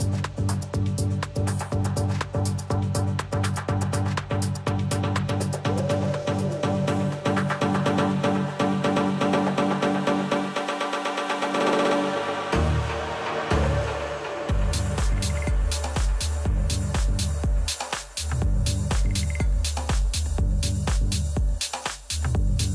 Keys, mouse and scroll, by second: 2.6-5.6 middle drag, 11.3 r, 12.8-15.2 middle drag, 14.7 a.